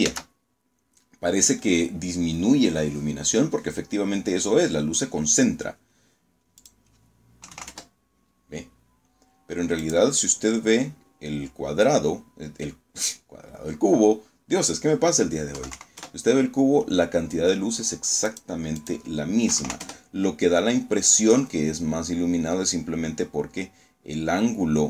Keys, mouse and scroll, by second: 5.5 click, 6.3 KP_7, 6.5 KP_Enter, 8.7 click, 14.4 KP_2, 14.6 KP_5, 14.9 KP_Enter, 17.1 click, 17.7 click, 18.4 KP_7, 18.5 KP_5, 18.7 KP_Enter.